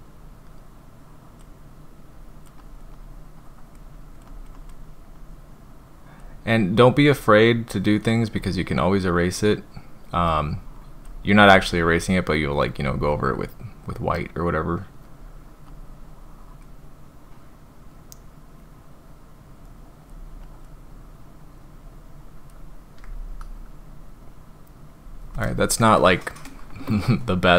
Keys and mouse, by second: 0.2-1.4 drag, 2.1 click, 2.6 click, 2.9 click, 3.9 click, 4.3 click, 4.5 click, 5.1-6.2 drag, 7.5-8.4 drag, 10.1-11.0 drag, 15.7-16.6 drag, 17.8-20.1 drag, 20.4 click, 20.9-22.5 drag.